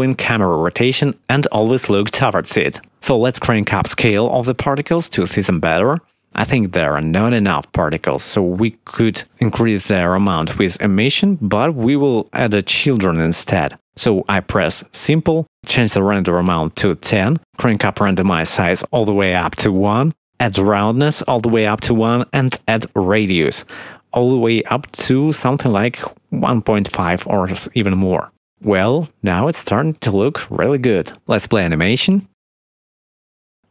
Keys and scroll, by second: 17.5 1, 18.1 0, 18.3 Return, 22.8 1, 33.4 space.